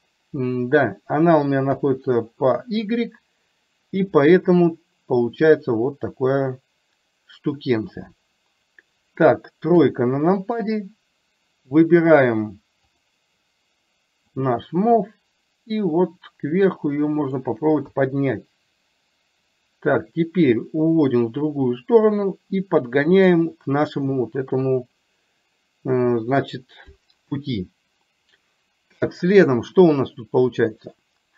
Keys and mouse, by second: 1.8 KP_1, 9.8 KP_3, 13.1 click, 14.7-17.4 drag, 17.9 KP_1, 19.6-23.4 drag, 24.5 KP_3.